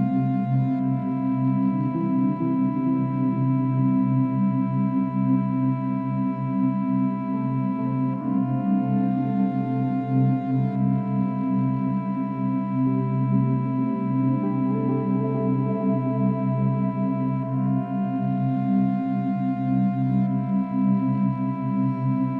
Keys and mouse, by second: 2.2 r, 2.6 x, 4.4-5.3 drag, 6.1-6.7 alt+drag, 7.0-9.5 alt+drag, 9.5 r, 9.8 x, 11.2 click, 11.9 alt+click, 12.5-13.6 alt+drag, 13.2-13.7 typing, 15.2-16.3 drag, 16.8 typing, 17.6-17.9 alt+shift+drag, 18.3-18.9 alt+shift+drag, 19.0 click, 19.8 typing.